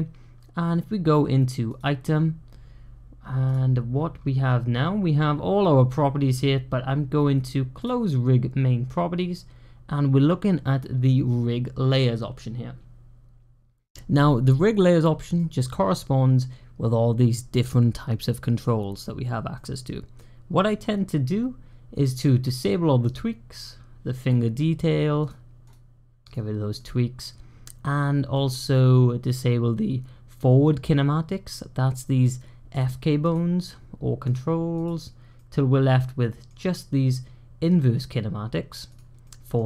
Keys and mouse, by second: 1.6 click, 7.7 drag, 15.3 middle click, 19.4-20.0 middle drag, 22.3 click, 24.0 click, 25.1 click, 25.5-26.2 drag, 26.6 click, 28.2-32.6 middle drag, 32.6 click, 33.1 click, 34.1 click, 34.6 click, 35.2-36.3 middle drag, 39.1-39.4 middle drag.